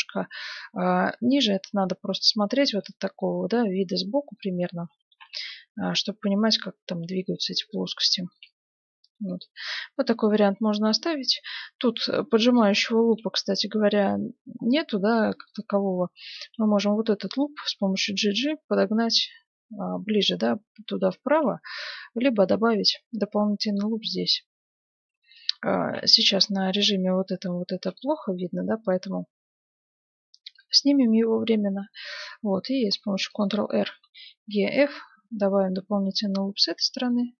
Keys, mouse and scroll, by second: 0.0-5.0 middle drag, 4.7 s, 7.8-9.5 middle drag, 8.4 Tab, 10.0 Tab, 13.5-16.5 middle drag, 15.4-17.9 right drag, 17.5-19.3 middle drag, 17.8 g, 21.0-23.4 middle drag, 22.6 ctrl+r, 25.9 ctrl+z, 27.8-29.6 drag, 30.5-32.4 middle drag, 32.8 ctrl+r.